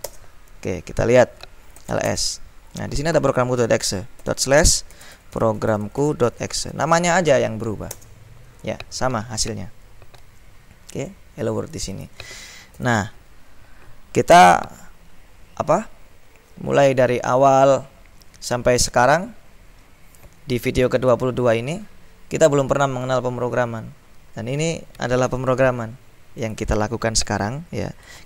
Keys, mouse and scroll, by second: 0.2 Return, 1.7-2.6 typing, 4.3-7.4 typing, 8.0 Return, 11.2-12.7 drag, 12.9 ctrl+l, 26.5 click, 27.8-28.2 typing.